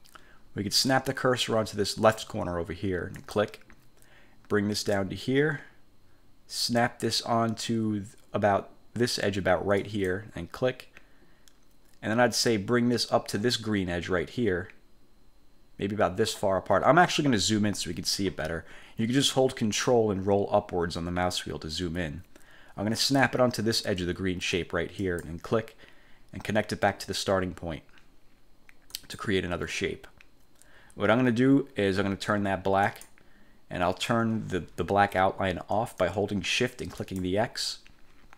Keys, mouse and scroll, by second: 3.3 click, 9.9 click, 20.4-21.5 ctrl+scroll up 6, 25.1 click, 29.1 click, 33.0 click, 37.1 shift+click.